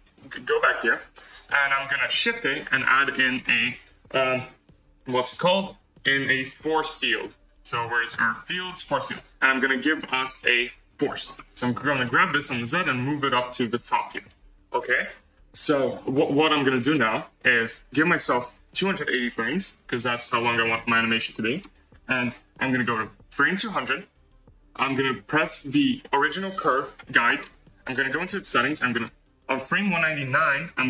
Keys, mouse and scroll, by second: 11.9 g, 14.9-15.9 middle drag, 15.9-16.5 scroll, 18.5-20.9 drag, 21.9 space, 23.4-25.8 drag, 29.0 Left.